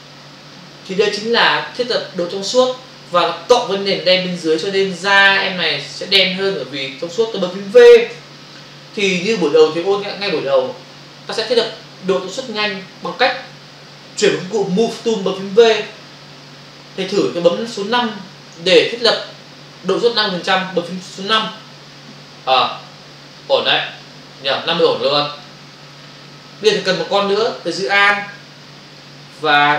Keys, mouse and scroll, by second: 25.4 click, 29.0 alt+click.